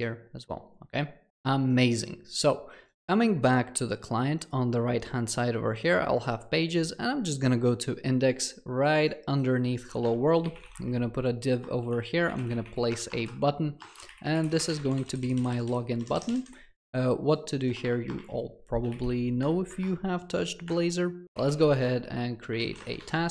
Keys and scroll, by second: 10.8 Tab, 19.6 Return.